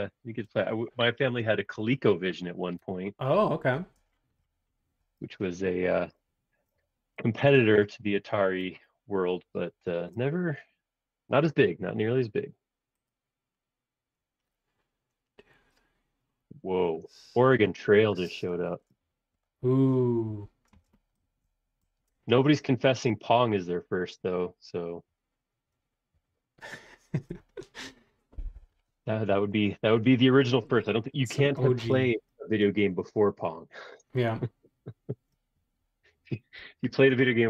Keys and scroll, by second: 0.5 space, 2.8 e, 3.9 space, 7.7 super+Tab, 18.8 super+Tab, 20.7 space.